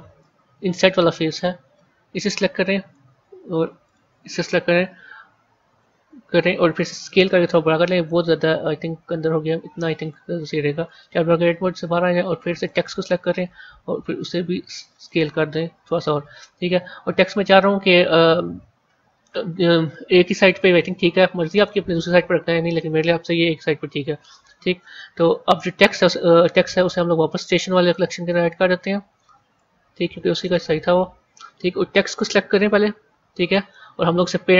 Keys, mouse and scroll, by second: 1.2 click, 2.1-3.8 middle drag, 3.8 shift+click, 4.7 KP_1, 5.7 KP_3, 7.1 s, 10.8 Tab, 12.4 click, 13.6 s, 15.7 a, 21.1-23.4 middle drag, 23.4 KP_1, 23.9 KP_3, 27.7 click, 28.3-29.5 scroll down 4, 29.5 click, 31.0 scroll up 4, 31.8 scroll down 1, 33.3 click.